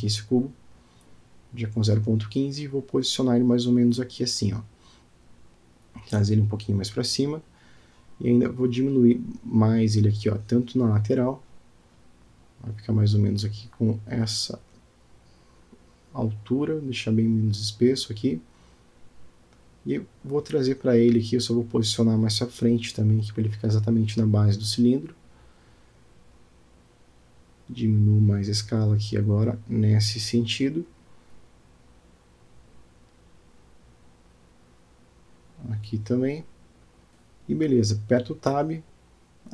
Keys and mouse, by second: 1.7 g, 3.6-4.5 middle drag, 6.2 g, 12.7 s, 19.9-20.9 middle drag, 21.3 shift+middle click, 22.3 g, 25.8-26.3 shift+middle drag, 26.9 s, 31.2-32.1 middle drag, 32.7 alt+middle click, 35.0 s, 37.3 Tab, 38.8 ctrl+r.